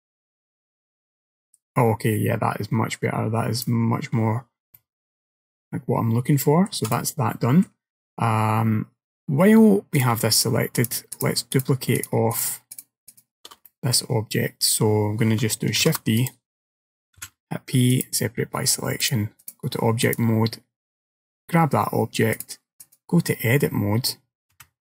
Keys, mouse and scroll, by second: 0.4 click, 4.8 middle click, 6.9 click, 7.4 middle click, 10.0 click, 10.4 shift+click, 10.8 click, 11.2 click, 11.6 click, 12.0 click, 12.4 click, 12.8 click, 13.2 shift+click, 13.7 middle click, 15.9 shift+d, 17.3 p, 19.1 click, 20.1 click, 21.1 click, 22.4 click, 24.6 a.